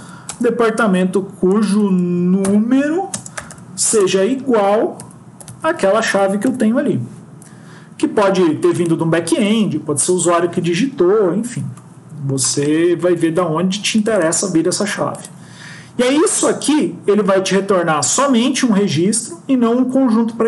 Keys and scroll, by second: 0.0 Up, 0.1 Return, 1.4 BackSpace, 6.4 End.